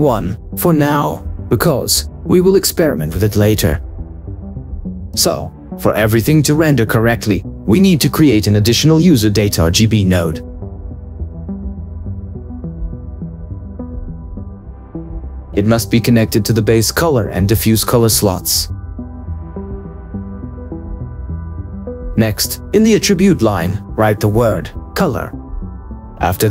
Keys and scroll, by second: 0.3 7, 0.9 Return, 2.2 1, 2.6 Return, 17.9 ctrl+2, 20.3 Escape, 22.2 ctrl+2, 23.5 Escape, 25.5 shift+c, 25.6 o.